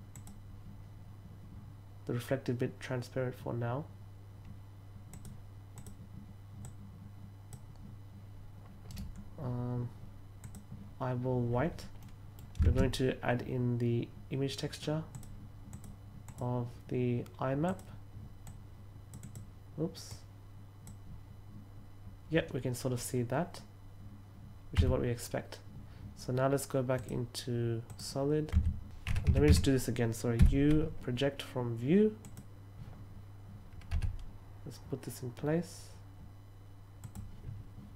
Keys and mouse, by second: 0.0 click, 5.0 click, 5.6 click, 6.6-7.4 drag, 8.8 right click, 10.3 click, 11.9 middle click, 12.6 shift+a, 15.0 click, 15.6 click, 16.1 click, 17.6 click, 18.4-19.0 drag, 19.1 click, 19.9-20.7 drag, 24.7 Tab, 26.8 click, 27.8 click, 28.5 Tab, 29.2 a, 29.4 a, 30.3 u, 32.1 click, 36.9 click.